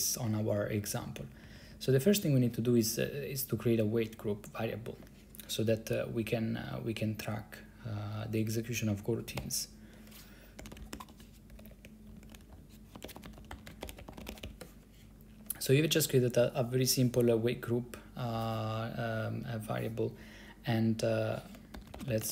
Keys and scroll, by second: 0.7 Down, 0.8 Down, 1.0 Down, 1.1 Down, 1.2 Down, 1.3 Down, 1.4 Down, 1.6 Down, 1.7 Down, 1.8 Down, 3.2 Right, 9.5-15.1 typing, 21.9 ctrl+c, 22.1-22.3 typing.